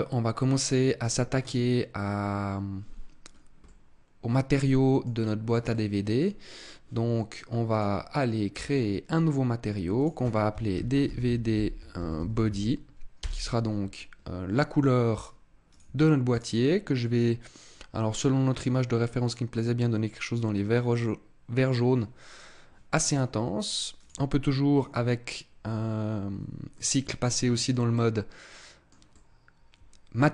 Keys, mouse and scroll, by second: 1.2 click, 3.1 scroll down 2, 3.5 middle click, 5.5 middle click, 7.5 click, 9.9 click, 15.5 click, 16.2 click, 23.0-23.8 scroll up 2, 23.8 click, 26.6 middle click, 27.8 middle click, 28.9 middle click.